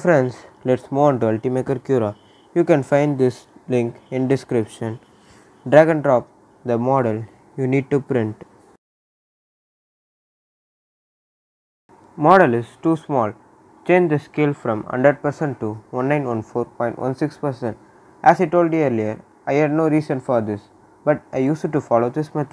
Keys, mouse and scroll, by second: 0.9 click, 3.2-9.3 drag, 9.8 right click, 10.2 scroll up 1, 10.8 middle click, 11.5 scroll up 1, 12.2 click, 15.6 click, 16.8-19.2 typing, 19.4 Return, 20.2 scroll down 1, 21.2 click, 21.6-22.5 right drag.